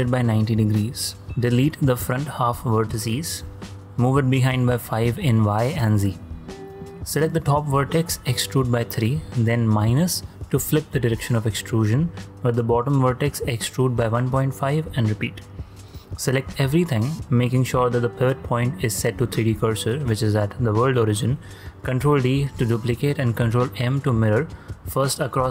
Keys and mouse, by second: 0.3 y, 0.6 9, 0.7 0, 1.2 Return, 1.2-3.0 drag, 3.4-6.5 typing, 5.8 KP_Enter, 7.0 KP_Enter, 7.0 click, 8.4 g, 8.6 y, 9.2 3, 10.3 -, 11.0 Return, 12.1 click, 13.6-15.3 typing, 15.6 Return, 16.5 a, 17.8 ., 18.0-19.2 drag, 21.9 shift+d, 22.4 click, 22.8 ctrl+click, 23.4 shift+click, 24.6 ctrl+m, 25.3 Return, 25.3 y.